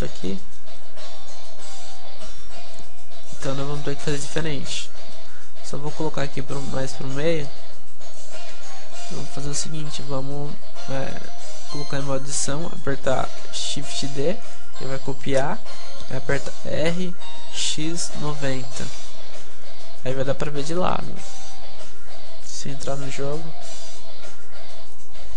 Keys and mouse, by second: 0.0 p, 3.1 middle click, 3.9 KP_7, 4.2 KP_5, 4.7 Tab, 4.9-8.2 middle drag, 6.0-8.2 drag, 8.4 Tab, 8.6 middle click, 9.4 KP_5, 10.2 KP_Decimal, 11.1 Tab, 13.8 shift+d, 16.0 click, 16.0 r, 19.0 Tab, 19.4 a, 19.7-22.3 drag, 20.1 a, 24.0-25.3 drag.